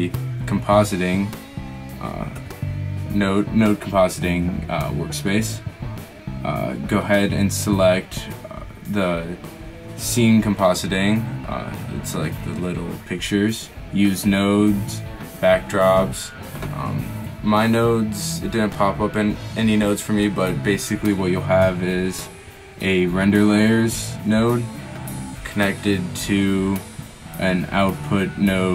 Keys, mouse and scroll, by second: 2.6 z, 20.1-20.4 drag, 23.7 shift+a.